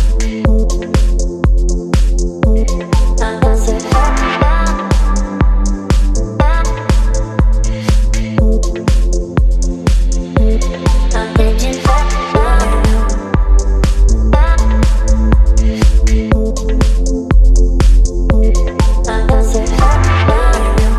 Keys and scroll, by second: 1.7 v, 14.4 Return.